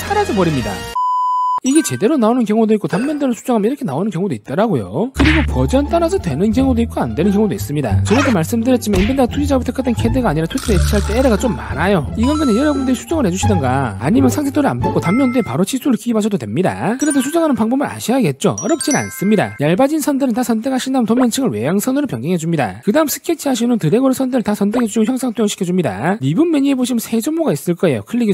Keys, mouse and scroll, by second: 19.8 click, 21.3 click, 22.3 click, 22.7 click, 23.2 click.